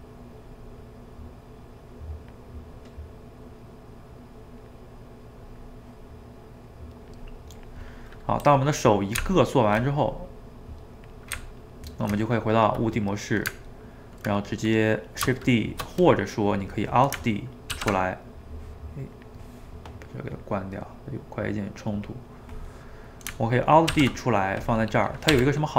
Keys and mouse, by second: 0.5-1.7 middle drag, 1.7 click, 2.5 middle click, 3.0-6.2 drag, 6.2 middle click, 7.0-8.0 drag, 8.0-9.2 middle drag, 9.2 Tab, 10.5 click, 11.4 Tab, 13.6-19.9 ctrl+middle drag, 22.9-23.9 middle drag, 23.9 alt+d, 24.9 middle click, 25.4 r.